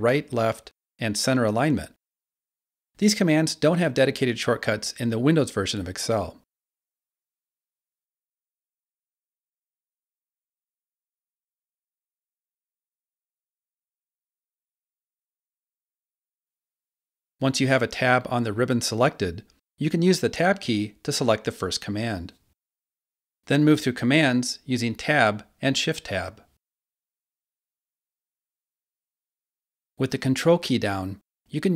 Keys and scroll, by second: 0.6 shift+Down, 3.3 ctrl+., 6.5 alt+h, 6.8-7.6 typing, 10.6 alt+h, 11.0-11.7 typing, 14.1 alt+h, 14.7-15.4 typing, 20.5 Tab, 26.0 shift+Tab.